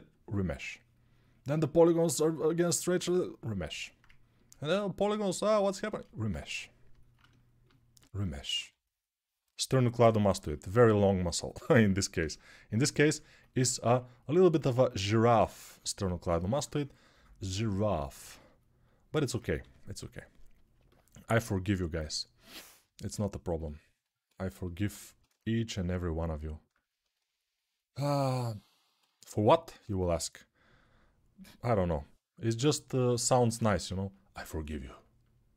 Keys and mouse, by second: 0.5 1, 10.6 2, 14.6 1, 18.1-35.5 ctrl+alt+drag, 19.4 g, 29.9 g.